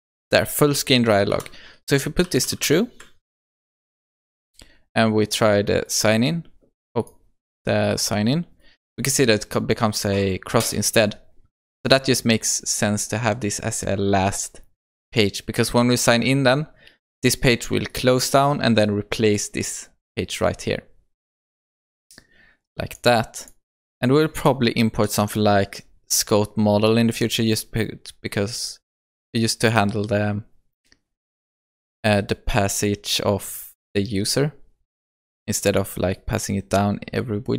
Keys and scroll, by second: 1.4 Return, 3.7 Return, 3.8 ctrl+s, 25.1 Tab.